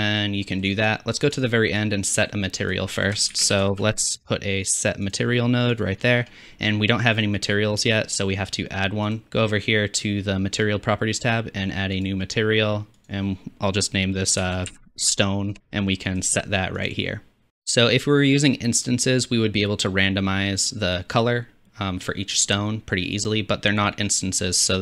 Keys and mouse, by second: 1.4 drag, 1.5 middle click, 1.9-3.1 drag, 3.1 middle click, 3.3 shift+a, 3.7 s, 9.1-12.0 drag, 17.5 click, 17.5 x.